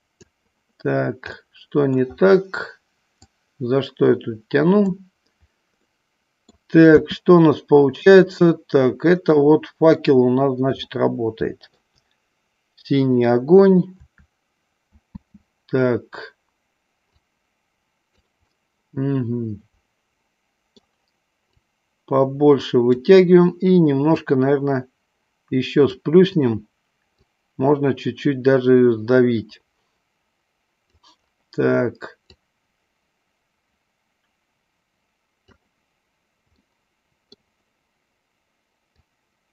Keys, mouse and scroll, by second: 1.4 scroll up 1, 1.5 middle click, 3.2-5.0 drag, 5.8-6.1 scroll up 1, 6.1 middle click, 7.0 space, 9.4 middle click, 10.0 scroll down 1, 10.9-11.9 shift+middle drag, 15.1 space, 17.1-18.2 drag, 18.5-20.9 middle drag, 21.7-23.0 drag, 24.1-26.0 drag, 27.3-30.9 drag, 32.3-35.6 drag, 36.6-37.5 middle drag, 38.9-39.5 drag.